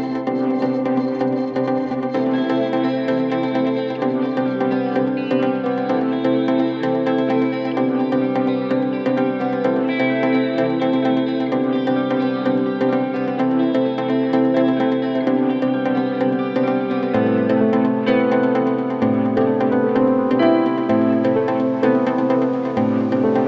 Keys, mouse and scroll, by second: 19.9 middle click, 20.6-21.5 scroll up 2, 21.5-22.9 scroll up 1.